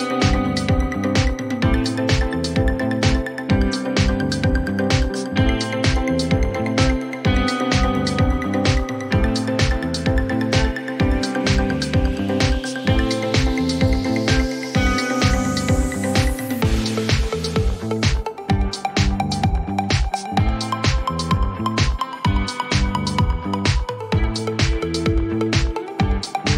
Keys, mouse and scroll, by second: 0.5 click, 0.8-2.0 typing, 5.1 click, 5.7 5, 6.0 Return, 7.6 click, 8.2 5, 8.5 Return, 9.9 click, 11.4 typing, 11.8 Return, 14.1 click, 14.5-15.5 typing, 18.1-18.7 scroll, 18.5 middle click, 19.6-20.0 scroll, 21.6 right click, 24.7 right click, 25.2 click.